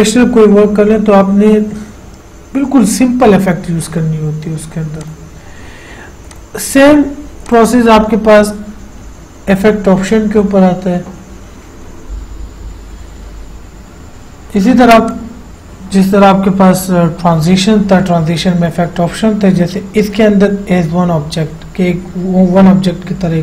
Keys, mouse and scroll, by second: 5.3 click, 12.5 F8, 15.3 click.